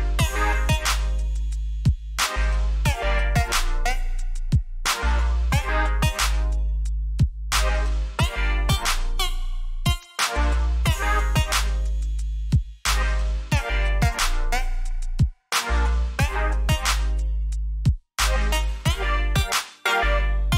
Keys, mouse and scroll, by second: 0.3-1.6 scroll up 5, 1.7-2.1 scroll down 2, 2.6 scroll down 1, 3.2 scroll up 1, 4.2 scroll down 1, 4.7 alt+scroll down 1, 5.7 scroll down 1, 6.2-6.6 scroll up 2, 7.4-7.9 scroll down 2, 10.3 ctrl+Num_Lock, 10.9 ctrl+shift+s, 13.0 click, 17.8-20.5 typing.